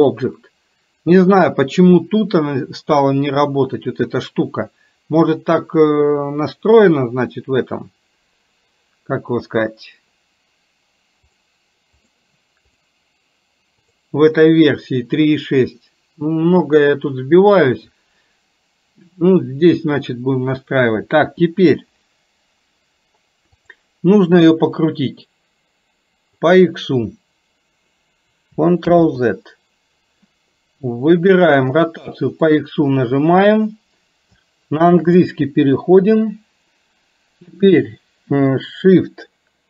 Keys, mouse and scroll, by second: 11.3 click, 12.8 click, 13.8 click, 23.7 click, 24.8 click, 25.2-26.5 drag, 28.9 ctrl+z, 32.6-39.6 drag.